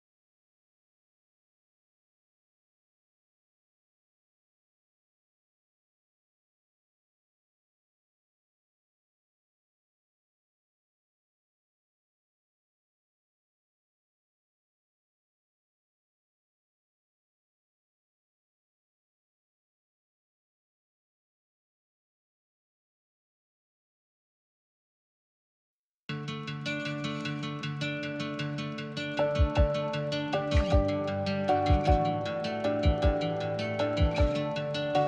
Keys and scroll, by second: 15.5-16.9 typing, 18.4 Return, 22.4-23.2 typing, 29.6 h.